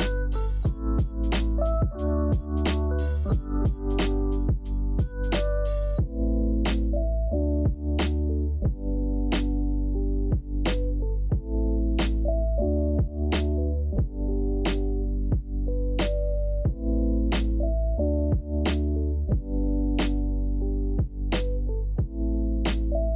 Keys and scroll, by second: 0.0-1.0 typing, 1.6 Tab, 2.0 e, 3.4 Tab, 3.6 Tab, 3.8 s, 4.0 Tab, 4.6 Tab, 5.7 `, 6.6 s, 6.6 x, 7.2 Tab, 7.4 Tab, 8.5 s, 8.9 g, 9.3 s, 9.8 Tab, 10.0 Tab, 10.1 g, 10.4 Escape, 11.7 e, 12.4 g, 12.7 Escape, 12.8 g, 13.1 Escape, 13.4 Escape, 13.8 alt+z, 14.1-18.0 typing, 14.5 Tab, 15.2 Return, 16.3 Tab, 19.0 x, 20.0 e, 20.5 e, 22.0 x, 22.7 x.